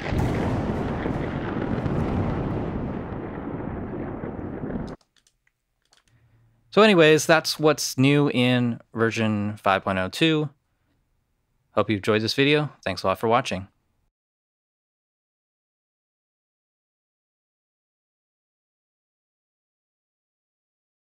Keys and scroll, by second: 4.7 space.